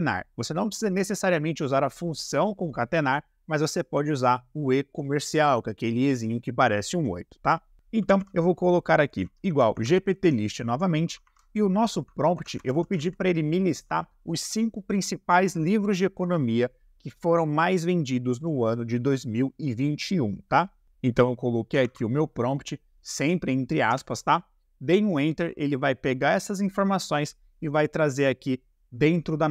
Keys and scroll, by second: 7.8 =, 8.0 g, 8.1 p, 9.3 t, 9.5 Down, 9.7 Tab, 11.2 shift+`, 12.3-13.0 typing, 20.8 1, 21.8 shift+`, 23.9 Return.